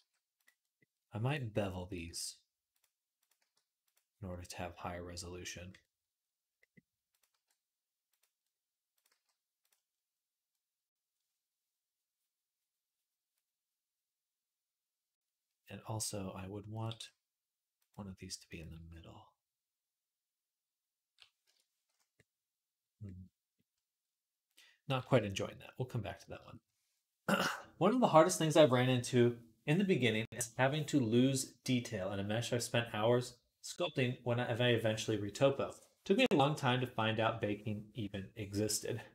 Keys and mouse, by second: 1.0 click, 1.7-8.8 middle drag, 1.9 g, 3.2 g, 7.1 g, 8.8 click, 8.9-16.5 middle drag, 8.9 g, 16.5 click, 16.6-18.2 middle drag, 16.8 g, 18.2 click, 18.4-39.1 middle drag, 18.6 g.